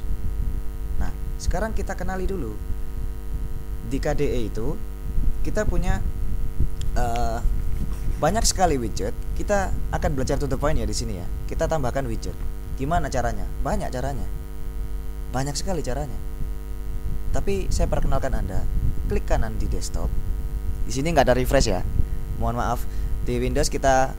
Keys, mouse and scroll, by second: 19.2 right click.